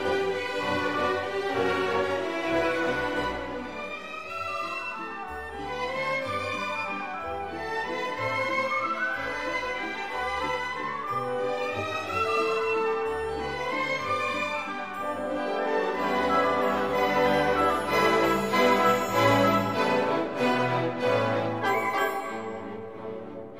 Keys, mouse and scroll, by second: 0.9-2.3 drag, 2.8-3.4 drag, 4.1-4.4 scroll down 2, 4.6-5.0 scroll up 2, 9.6 click, 11.1 click, 13.1 scroll down 2, 13.4 scroll up 2, 14.7 click, 16.4 click, 18.4 click, 19.2-19.6 scroll down 2, 20.2-20.6 scroll up 2, 21.1 click, 22.2 click, 22.9 click.